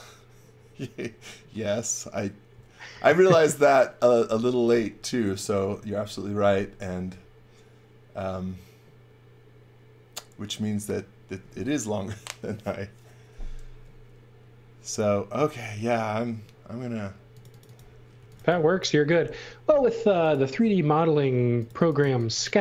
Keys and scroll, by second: 15.7 space, 17.9-19.0 typing, 21.5-22.6 typing.